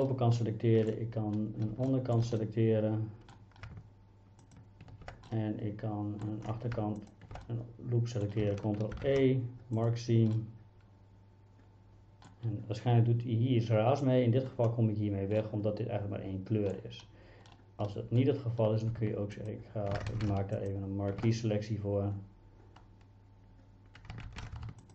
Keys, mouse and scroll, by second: 0.1 middle click, 1.9 shift+middle click, 2.4 middle click, 3.7 shift+a, 5.3 middle click, 6.8 shift+a, 7.0 click, 7.5 middle click, 9.0 ctrl+e, 10.4-12.3 middle drag, 15.4-16.7 middle drag, 17.9 middle click, 18.9 shift+a, 19.5 click, 20.1 ctrl+z, 20.3 shift+a, 20.6 click, 24.3 ctrl+z, 24.7 shift+a, 24.8 click.